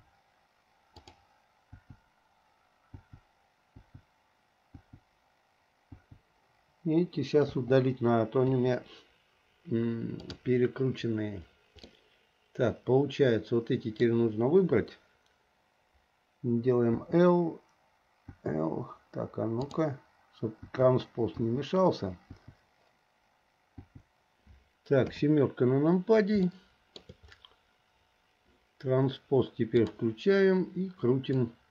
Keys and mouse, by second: 0.0 l, 1.1 click, 2.0 l, 3.2 l, 4.0 l, 6.2 click, 7.7 click, 8.6 Delete, 12.2-14.2 drag, 12.2-14.2 right drag, 17.2 click, 18.6 click, 20.9 click, 21.7 click, 22.6 click, 24.0 click, 25.2 KP_7, 26.7 shift+middle click, 30.1 click, 31.5-31.7 drag.